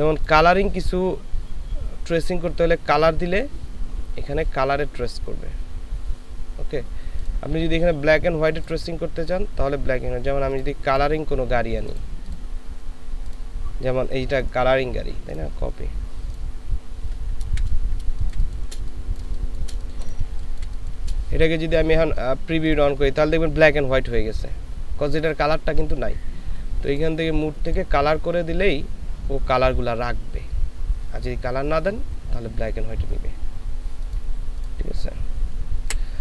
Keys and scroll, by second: 17.7 ctrl+v, 18.1 ctrl+space, 19.3 space, 20.3 ctrl+space, 35.9 Delete.